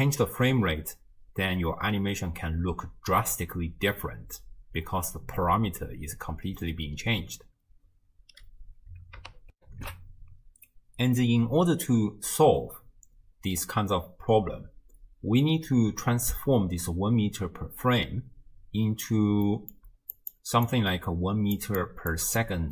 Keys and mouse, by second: 9.5 ctrl+alt+shift+w, 9.7 ctrl+alt+shift+q, 19.5 click, 19.9-22.4 d, 20.2 click, 20.7 click, 21.8 click, 22.4 click.